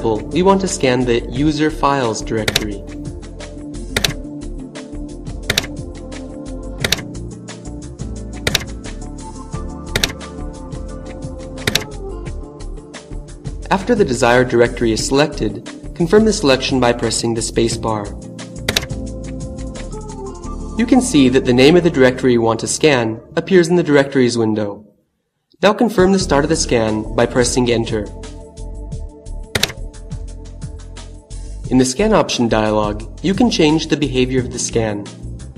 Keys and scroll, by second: 0.8 Down, 3.5 Down, 5.2 Down, 6.7 Down, 8.1 Down, 9.5 Down, 11.0 Down, 18.0 space, 28.3 Return.